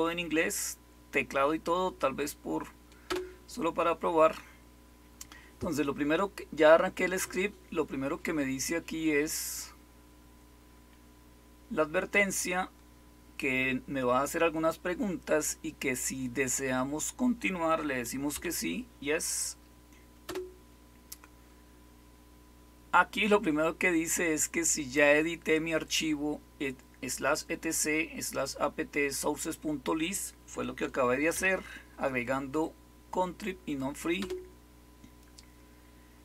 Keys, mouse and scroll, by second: 3.0 Return, 18.3 typing, 20.2 typing, 31.3 y, 34.1 Return.